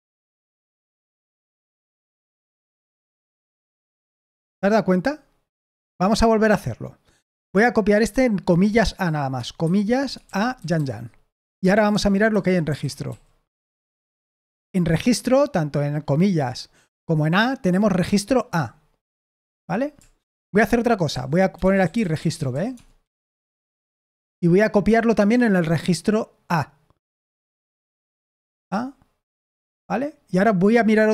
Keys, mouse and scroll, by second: 5.4 Escape, 7.2 typing, 9.9-11.2 typing, 12.4-13.5 typing, 13.6 Return, 19.5 Escape, 20.8-23.0 typing, 23.2 Escape, 28.5-29.3 typing.